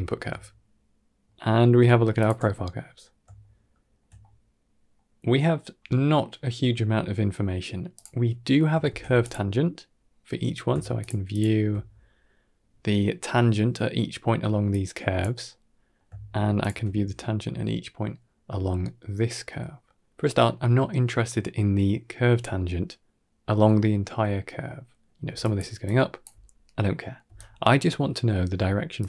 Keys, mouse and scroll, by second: 0.3-0.8 shift+middle drag, 1.2 middle click, 2.0 alt+shift+click, 2.5-3.1 middle drag, 3.3-3.8 shift+middle drag, 4.1-4.8 middle drag, 7.8 click, 8.0 middle click, 8.7 shift+d, 10.0-10.3 middle drag, 10.9 ctrl+shift+drag, 14.6 click, 15.4-15.8 middle drag, 16.5 ctrl+shift+click, 25.1-28.4 typing, 25.3 click, 26.1 click, 27.2 right click, 28.8 click.